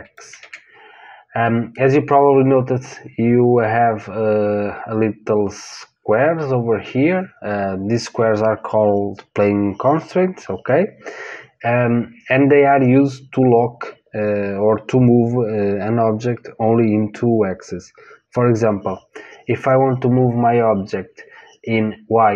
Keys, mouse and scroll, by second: 0.3 ctrl+z.